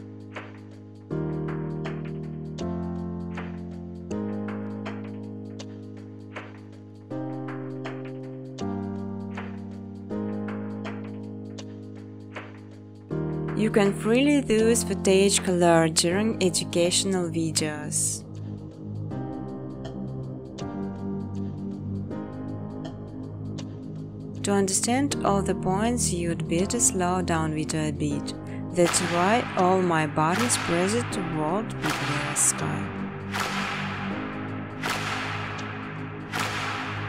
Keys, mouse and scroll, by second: 0.2 click, 1.9 click, 2.2 click, 2.4 click, 2.7 click, 2.9 click, 3.4 click, 3.7 click, 4.4 click, 5.1 click, 5.5-6.1 typing, 6.9 middle click, 7.6 click, 8.8 click, 9.1 click, 12.5 click, 13.3 click, 14.5 click, 14.9 click, 16.3 click, 17.0 click, 17.6-18.9 typing, 19.7 middle click, 22.1 scroll, 23.1 click, 23.4-26.7 scroll, 26.7 click, 27.3-27.7 scroll, 28.5 click.